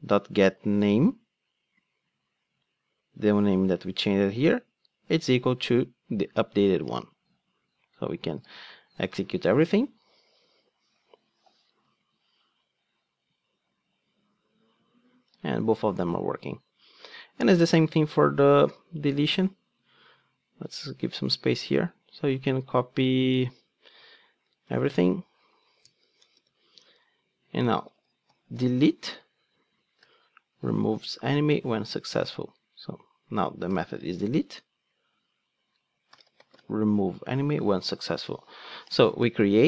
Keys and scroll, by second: 8.4 ctrl+d, 24.7 super+c, 26.3 super+v.